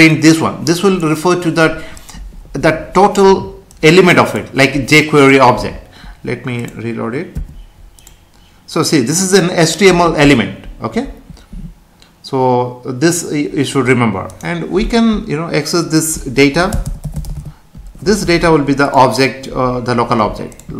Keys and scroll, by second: 7.3 F5, 16.7 BackSpace, 18.3 ctrl+s.